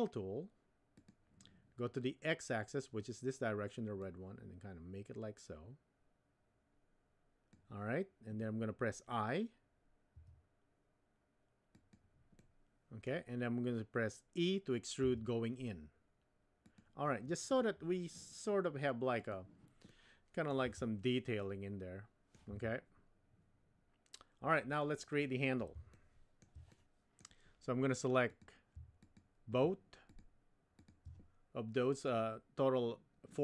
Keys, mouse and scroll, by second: 1.0 click, 4.0-7.6 drag, 10.1 i, 12.5 middle click, 15.0 e, 19.2 click, 20.0 middle click, 20.6 Tab, 21.4-22.3 middle drag, 22.5 Tab, 25.9 shift+middle click, 26.7 middle click, 28.3 click.